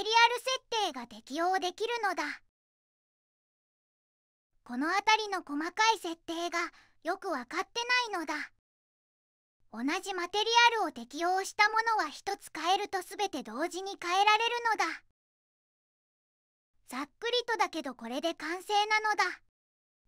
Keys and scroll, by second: 4.0 m.